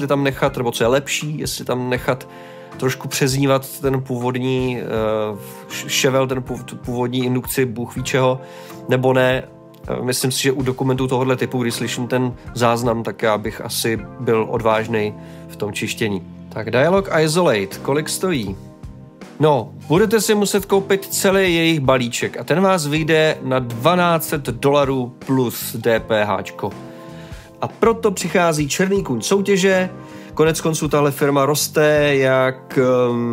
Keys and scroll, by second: 16.3 typing.